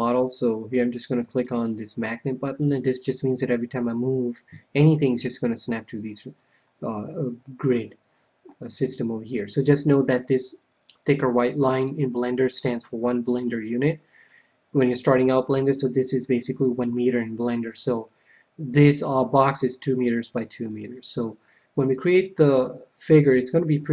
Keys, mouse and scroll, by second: 1.2-3.2 drag, 6.0-9.5 middle drag.